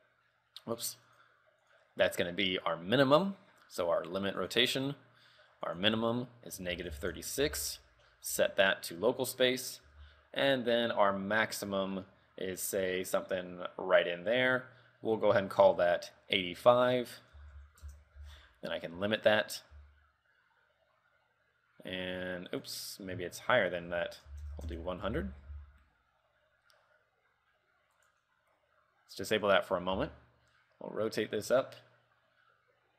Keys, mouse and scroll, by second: 0.9 click, 1.2 click, 1.8 click, 5.8 ctrl+click, 8.4-10.0 alt+scroll up 5, 10.0 r, 16.8 ctrl+click, 19.5 click, 20.0 r, 23.8 ctrl+click, 25.8 r, 29.7 click, 30.2 r.